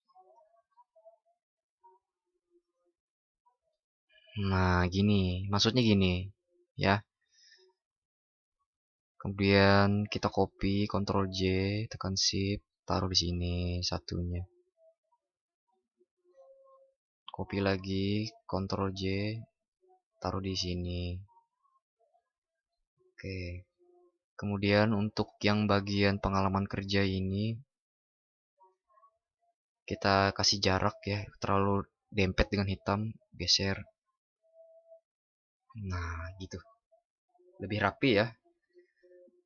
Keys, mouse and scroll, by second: 10.7 ctrl+shift+i, 18.3 ctrl+shift+i.